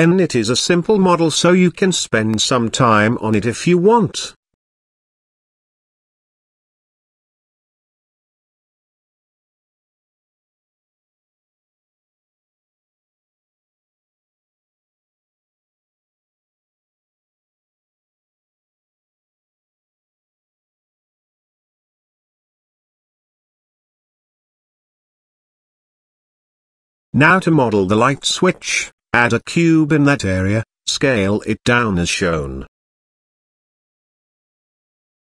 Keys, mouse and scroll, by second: 1.8 Tab, 2.5 z, 3.0-4.0 middle drag, 4.5-5.8 middle drag, 6.4-9.4 middle drag, 9.9-11.2 middle drag, 11.6-11.9 shift+middle drag, 12.9-14.4 middle drag, 15.1-15.7 middle drag, 15.9-16.4 middle drag, 16.9 shift+middle click, 17.7-18.0 middle drag, 18.5-19.2 shift+middle drag, 19.4 middle click, 20.1 KP_0, 22.0 click, 23.0 click, 23.6 click, 26.1 middle click, 27.5 click, 28.2 click, 28.5 shift+a, 29.7 s, 31.9 KP_Decimal, 32.7 scroll up 1, 32.8 middle click, 33.3 s, 34.4 s.